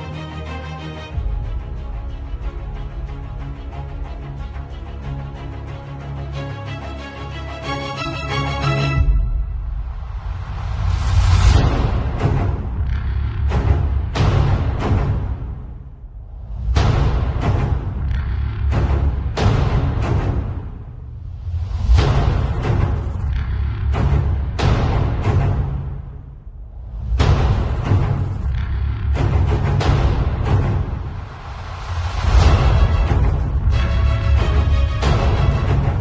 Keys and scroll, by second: 2.0-3.5 typing, 3.6 alt+Delete, 4.6-6.6 typing, 8.1 x, 10.9 space, 11.3 ], 12.8 z, 13.5 space, 13.8 b, 14.1 ], 18.5 x, 18.8 [, 20.0 ], 24.9 z, 25.2 space, 25.7 v, 26.1 super+j, 32.2 z, 33.0 b, 34.3 x, 35.0 [.